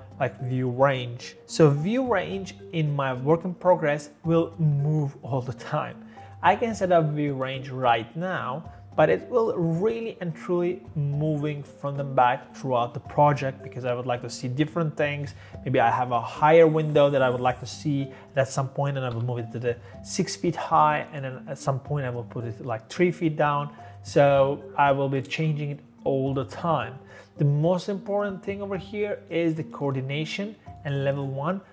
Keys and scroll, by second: 19.2 6.